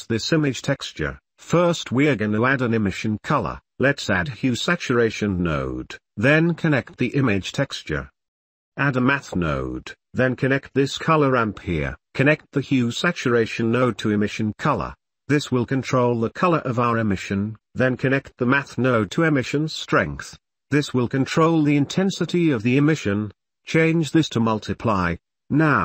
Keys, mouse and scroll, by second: 0.8-1.3 drag, 2.1 shift+a, 7.0-7.9 drag, 10.1 g, 11.4-11.8 drag, 11.9 click, 12.1 middle click, 13.0 middle click, 13.3 middle click, 14.2 click, 14.4 middle click, 14.8 click, 20.9-22.6 drag, 22.8 middle click, 23.2 click, 24.5-25.8 drag.